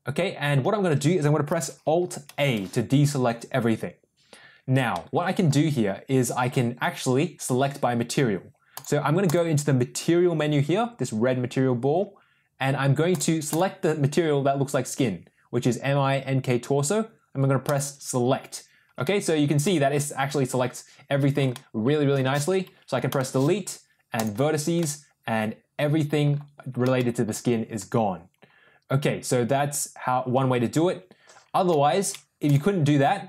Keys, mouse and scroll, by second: 2.2 alt+a, 4.9 middle click, 8.6 click, 9.2 click, 13.0 click, 13.4 click, 17.7 click, 18.9 shift+middle click, 19.5-21.3 middle drag, 21.4 shift+click, 23.0 Delete, 24.7-26.1 drag, 26.9 shift+click, 31.6 ctrl+z.